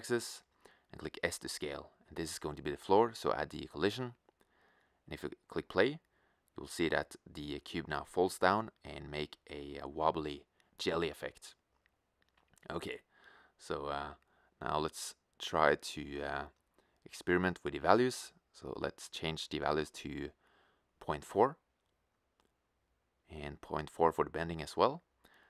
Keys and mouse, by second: 1.1-2.4 drag, 6.0-7.0 drag, 8.3-10.6 middle drag, 11.5 click, 16.4-18.2 right drag, 23.1-25.1 drag, 23.1 right click.